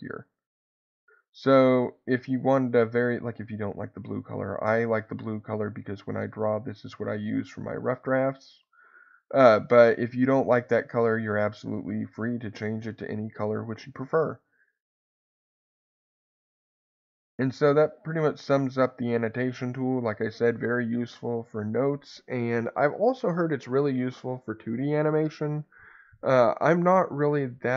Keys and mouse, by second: 14.8-16.0 drag, 16.9-20.0 drag, 20.9-24.9 middle drag.